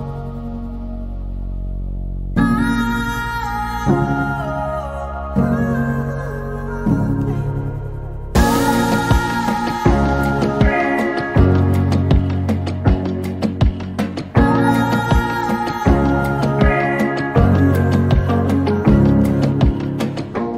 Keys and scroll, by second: 0.3-1.0 typing, 4.2 r, 6.9 f, 8.5-8.9 typing, 10.4 Delete, 12.6 p, 13.5 space, 17.1-18.1 typing.